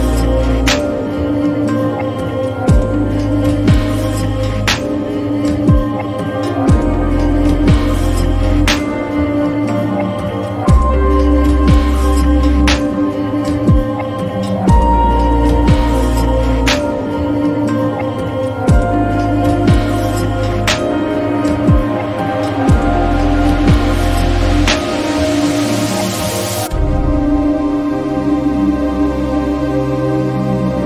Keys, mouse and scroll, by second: 2.8-9.2 drag, 12.8 click, 12.9-17.0 drag, 18.7 click, 21.9 click, 23.6-24.8 drag, 24.8 ctrl+z, 25.5 click, 27.9 click.